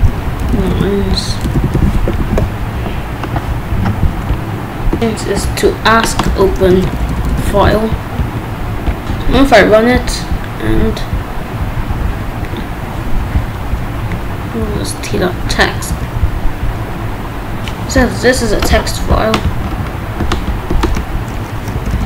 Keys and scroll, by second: 0.0-2.2 typing, 6.8 Left, 6.8 BackSpace, 7.5 ctrl+s, 15.9 Return, 20.9 Left.